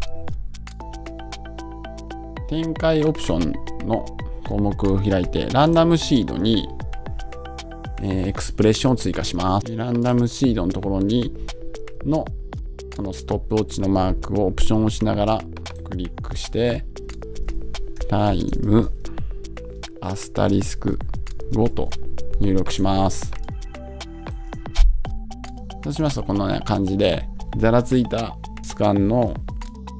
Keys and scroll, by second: 21.6 Return.